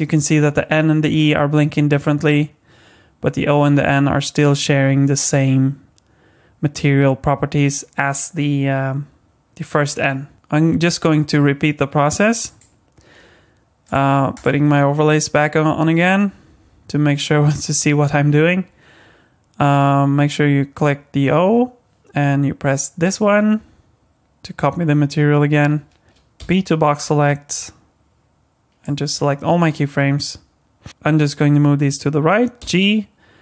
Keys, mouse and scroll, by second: 10.3 space, 12.4 click, 13.8 click, 14.3 click, 23.0 click, 26.1 alt+a, 26.1 click, 26.4 b, 32.6 g.